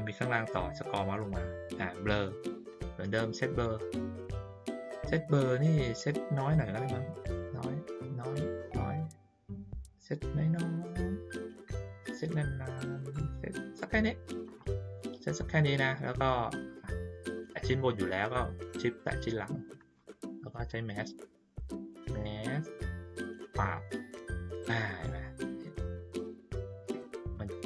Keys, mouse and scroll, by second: 0.8-1.1 scroll down 1, 2.7 click, 5.9 click, 6.9-13.8 drag, 16.2 ctrl+middle click, 18.9 shift+click, 20.5 click, 23.2 click, 25.4 ctrl+middle click, 25.7 ctrl+middle click, 26.0 ctrl+middle click.